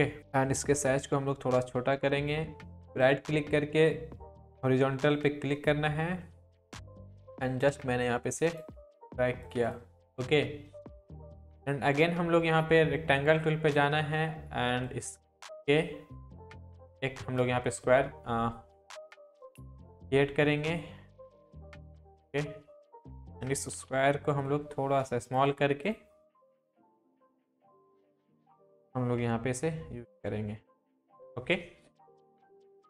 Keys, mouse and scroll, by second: 0.6 ctrl+t, 1.6-2.5 drag, 2.9 right click, 3.8 click, 6.3-7.6 drag, 8.2-8.8 click, 10.2-11.1 drag, 18.4-19.2 scroll down 1, 19.2-19.9 drag, 23.7 ctrl+t, 24.5-25.4 drag, 27.8-29.0 drag, 29.3 Right, 31.9 click.